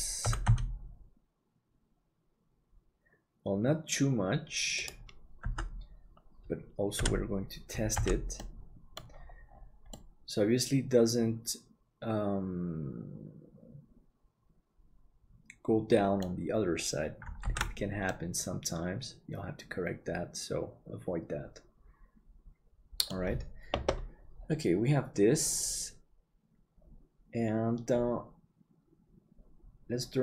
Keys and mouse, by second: 0.2 g, 5.5 Tab, 7.0 KP_Divide, 7.9 alt+z, 9.2 middle click, 9.9-17.6 middle drag, 17.6 ctrl+s, 18.0-23.2 middle drag.